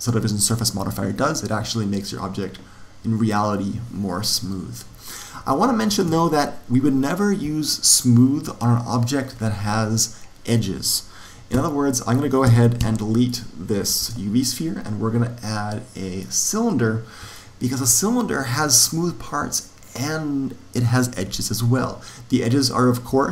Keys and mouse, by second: 5.4-7.5 middle drag, 11.5 z, 12.4 z, 12.7 x, 14.0 shift+a, 17.3-19.3 middle drag, 23.0 Tab.